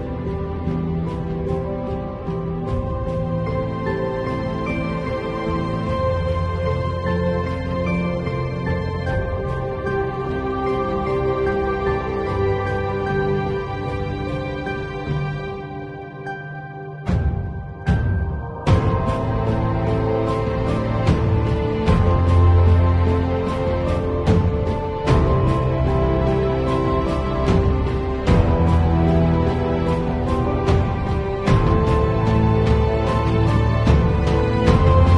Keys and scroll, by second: 2.9 d, 3.4 alt+Delete, 5.0 space.